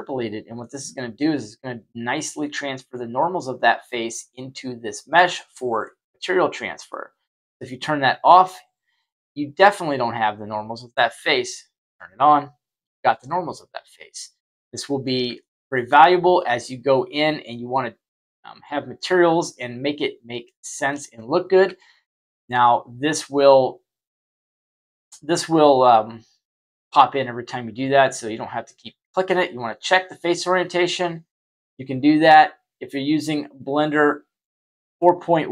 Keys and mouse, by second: 0.1 click, 7.5 click, 9.0-10.9 middle drag, 12.2 click, 13.8-15.0 middle drag, 15.3-15.7 shift+middle drag, 16.0 middle click, 19.5-20.4 middle drag, 21.7-22.4 shift+middle drag, 24.3-25.7 middle drag, 28.0 click, 29.7 click, 31.6-34.4 middle drag.